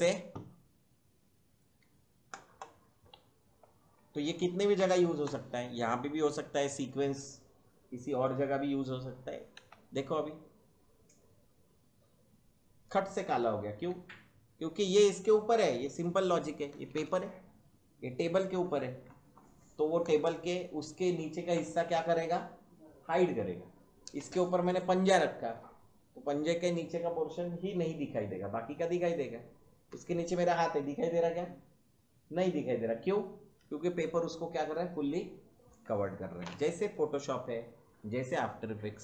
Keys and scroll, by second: 9.6 space, 13.8 space.